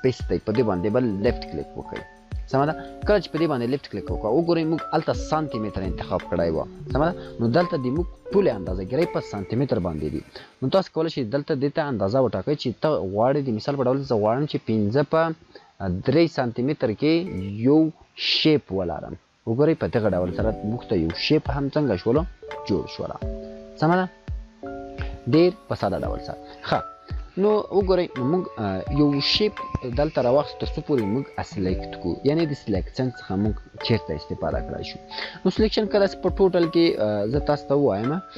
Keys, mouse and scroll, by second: 1.1 click, 1.4 click, 4.8-5.5 click, 14.2 click, 14.7 5, 16.5 click, 16.9 3, 18.2 click, 20.4-24.8 drag, 27.5 click, 35.8-36.7 click.